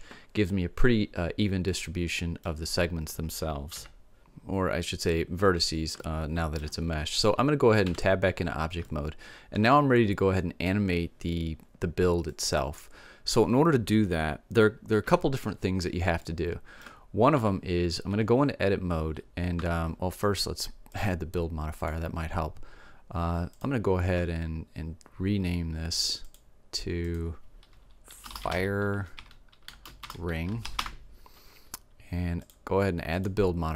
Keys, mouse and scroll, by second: 1.7-3.8 middle drag, 3.8 KP_7, 6.2-8.2 middle drag, 8.1 Tab, 8.7-10.8 middle drag, 12.5-14.4 middle drag, 15.2 KP_7, 16.4 middle click, 17.5 Tab, 19.8 Tab.